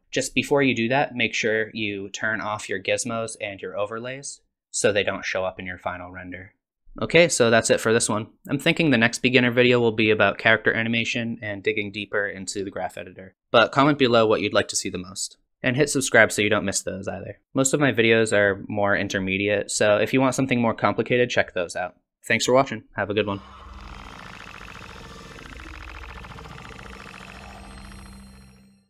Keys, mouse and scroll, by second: 2.7 click, 4.1 click.